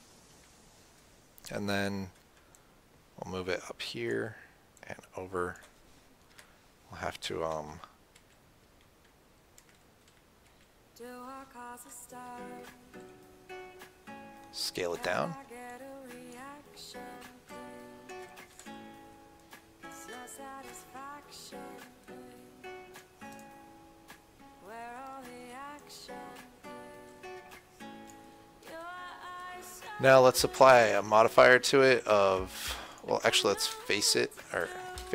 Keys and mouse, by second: 0.1 KP_1, 0.6 KP_3, 2.8-6.7 drag, 6.6 KP_7, 8.0-10.7 typing, 13.2 s, 16.0-19.3 drag, 18.8 s, 21.0-23.3 drag, 23.6-26.1 right drag, 30.6-34.8 drag, 34.1 f, 34.8 Tab.